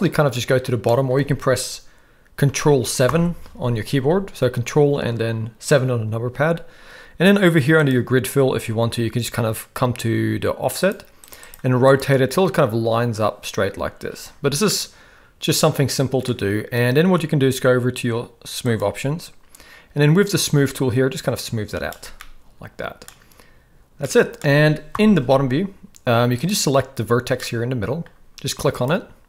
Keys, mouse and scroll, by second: 3.1 ctrl+KP_7, 11.5 click, 14.7-16.2 middle drag, 18.7 click, 20.2-22.2 drag, 22.2-23.0 middle drag, 23.0-23.9 scroll down 1, 24.0-24.3 middle drag, 24.9 ctrl+KP_7, 26.3 click, 27.4-28.0 middle drag, 28.7 click.